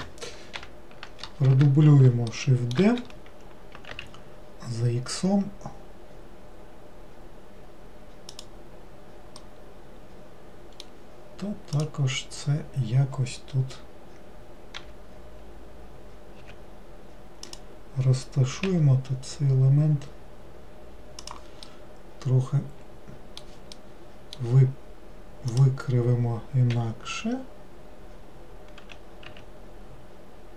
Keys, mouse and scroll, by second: 0.6 ctrl+l, 2.4 middle click, 2.9 shift+d, 9.5-11.8 middle drag, 11.8 click, 21.7-25.6 middle drag, 25.6 click.